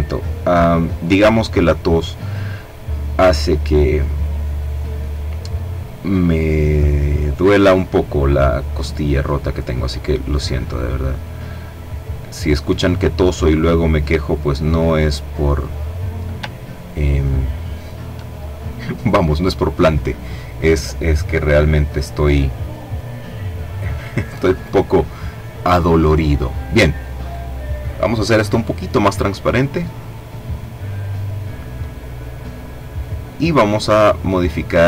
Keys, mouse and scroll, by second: 1.6-4.3 drag, 4.9-7.4 drag, 8.2 click, 9.2-11.8 drag, 12.6-14.8 drag, 15.4-16.0 ctrl+scroll down 2, 16.5-17.0 ctrl+scroll down 2, 17.6 middle click, 17.9 click, 18.1-19.2 middle drag, 26.1 click, 27.5-31.5 drag, 31.8 click, 33.6-34.8 drag.